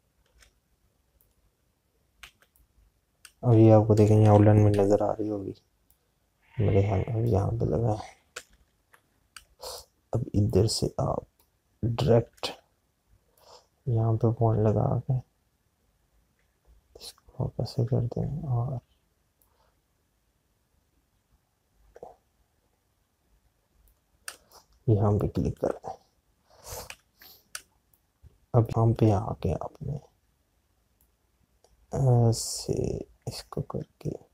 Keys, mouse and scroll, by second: 0.2 space, 0.4 click, 1.1 space, 2.1 click, 5.6 p, 6.9 click, 9.9 space, 14.5 click, 20.5 alt+click, 24.8 space, 28.2 space, 33.1 click.